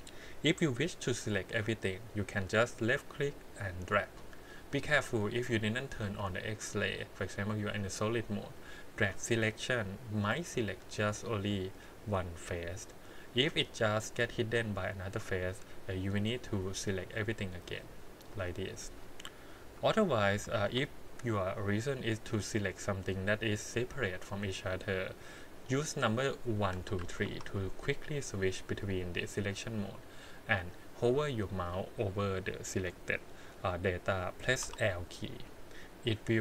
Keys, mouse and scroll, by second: 2.7 click, 3.1-4.1 drag, 7.1 click, 7.7 click, 8.8 click, 9.9-11.5 middle drag, 15.9 click, 17.0 middle click, 17.8 click, 19.6 KP_1, 20.6 alt+a, 23.7 3, 26.7 1, 27.0 2, 27.2 3, 31.4 click, 34.6 l, 36.3 click.